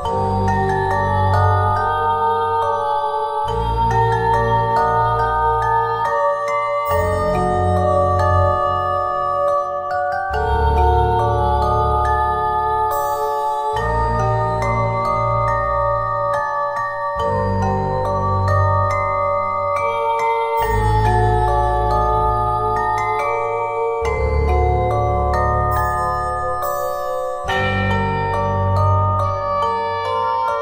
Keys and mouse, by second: 7.6 Tab, 9.0 Tab, 12.1-13.4 drag, 13.4-14.8 right drag, 14.8 click, 14.9 Tab, 18.8 KP_1, 20.4 Tab, 21.5 Tab, 22.2 shift+a, 23.2 s, 26.2-27.5 middle drag, 27.5 KP_1, 27.7 middle click.